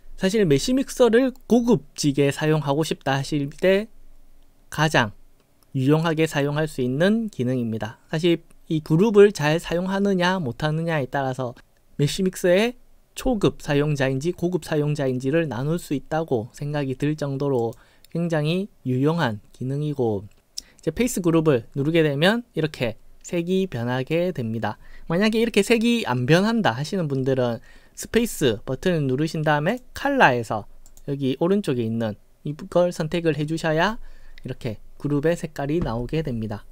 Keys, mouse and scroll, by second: 17.6 click, 24.2-26.0 right drag, 27.3 space, 29.7 click, 30.9 click.